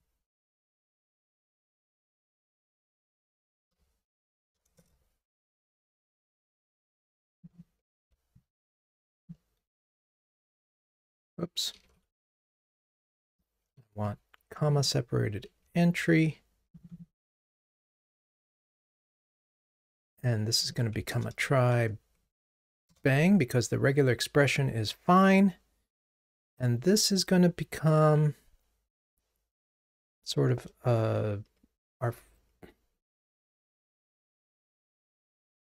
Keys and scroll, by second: 0.0 shift+F6, 8.0 super+c, 9.9 super+v, 11.9 super+z, 14.4 super+c, 15.6 super+c, 15.6 super+v, 21.1 alt+Return.